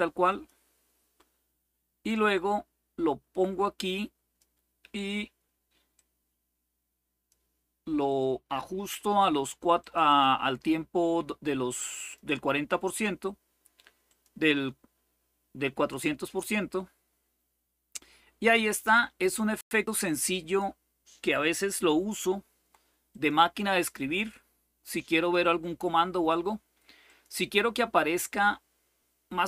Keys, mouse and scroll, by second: 0.0 click, 1.9-4.2 drag, 5.7-7.6 drag, 9.7 click, 9.9 click, 11.7 click, 13.8 click, 18.6 click, 20.1 click, 22.8 click, 26.8 click, 27.4 click.